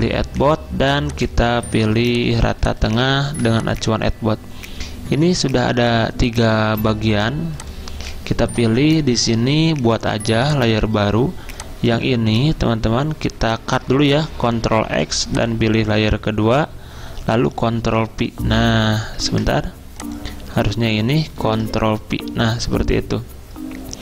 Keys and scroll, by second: 1.8 z, 3.1-3.8 typing, 14.9 ctrl+x, 17.8 ctrl+f, 19.3 ctrl+z, 21.4 ctrl+v.